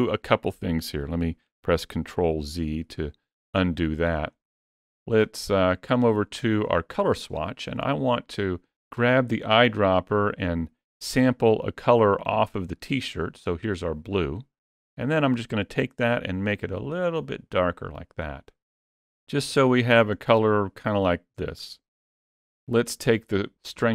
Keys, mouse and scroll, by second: 2.1 ctrl+z, 4.8 middle click, 7.0 click, 13.9 click, 19.5 click, 22.9 ctrl+z.